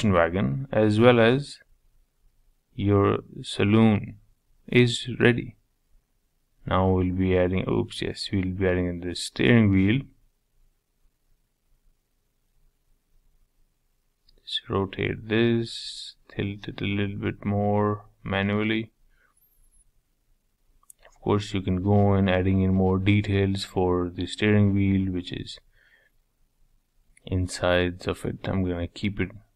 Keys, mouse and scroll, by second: 0.0 KP_7, 1.1 shift+right click, 1.4-4.3 middle drag, 4.3 shift+a, 5.0 middle click, 5.7 s, 8.2 s, 9.9 r, 14.2-14.5 scroll down 3, 14.5 middle click, 15.2 r, 17.0 shift+middle click, 17.9 g, 19.1-19.8 scroll up 5, 19.8-21.6 shift+middle drag, 21.6 Tab, 22.4 3, 22.9 click, 24.6 Tab, 26.2 ctrl+a, 26.6 Tab, 28.4 i.